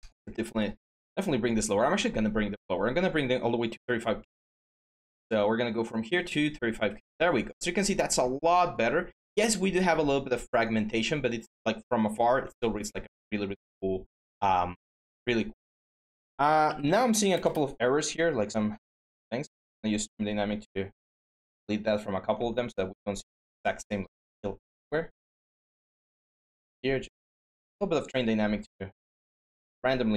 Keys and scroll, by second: 15.9-17.1 typing.